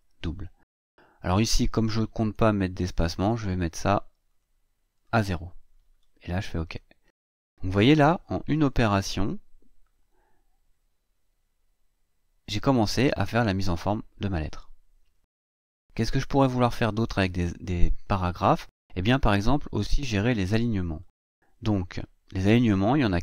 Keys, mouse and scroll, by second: 3.2 click, 4.1 click, 6.4 click, 9.0 ctrl+scroll down 2, 9.6 ctrl+scroll up 2, 10.5 ctrl+scroll down 2, 12.0 scroll down 2, 12.5 scroll down 2, 13.1-15.2 scroll down 2, 15.2 click, 16.7 scroll up 2, 21.7 scroll down 2, 22.3-23.2 scroll down 2.